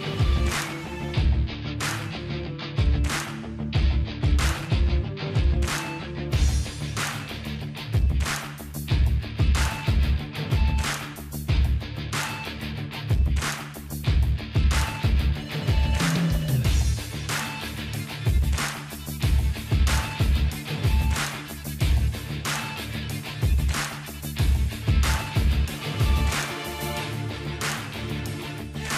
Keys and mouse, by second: 2.3 ctrl+z, 2.9-4.1 middle drag, 3.9 shift+d, 4.6 p, 4.9-6.5 drag, 6.6 ctrl+i, 6.7 h, 6.9 Tab, 7.4-8.8 middle drag, 8.8-10.5 drag, 10.5 middle click, 11.3-13.6 drag, 14.5 ctrl+x, 14.5-19.6 drag, 19.6 middle click, 20.1-21.3 drag, 20.8 ctrl+c, 21.7 middle click, 22.2 ctrl+c, 22.5 ctrl+x, 23.0 ctrl+r, 23.0 click, 23.6-24.9 middle drag, 24.1 a, 25.0-26.0 drag, 26.0 middle click, 26.4-27.9 drag, 27.3 Tab, 27.9 middle click, 28.1 click.